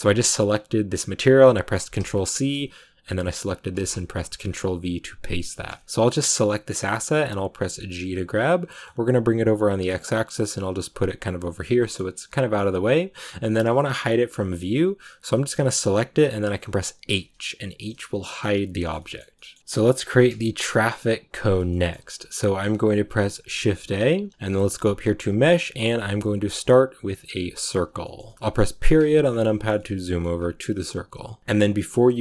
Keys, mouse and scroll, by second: 2.2 click, 3.1-4.4 drag, 5.4 shift+middle click, 6.3 right click, 6.5 scroll down 2, 6.7-7.9 middle drag, 7.9 g, 11.7 middle click, 12.3 a, 13.7-15.1 middle drag, 15.1 right click, 15.9-17.0 middle drag, 17.0 h, 18.7-19.9 shift+middle drag, 19.9-21.6 scroll up 1, 21.6-27.4 shift+middle drag, 27.9 shift+middle click, 28.7 KP_Decimal, 29.2 scroll down 4, 29.4-32.2 middle drag.